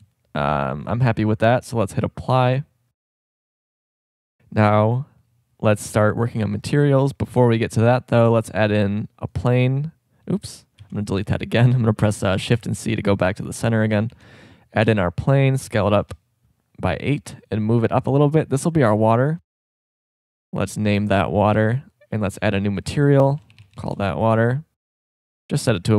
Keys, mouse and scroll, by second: 4.1 click, 4.8-7.3 middle drag, 8.1 shift+a, 10.8 x, 12.5 shift+c, 14.1 shift+a, 15.7 s, 17.5 click, 18.3-19.6 drag, 20.3-21.3 drag, 21.5-24.8 drag, 25.0-25.9 drag.